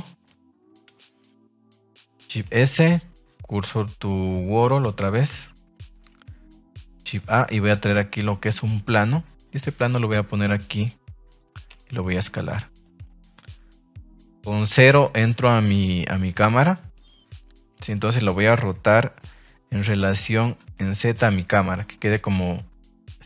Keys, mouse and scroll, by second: 0.0 middle click, 0.8 KP_1, 2.4 shift+s, 5.3 shift+s, 7.0 shift+a, 9.5 drag, 11.0-11.3 middle drag, 12.8 click, 13.4 KP_0, 13.9 KP_0, 15.7 KP_0, 19.1 r, 20.6 z, 22.2 click.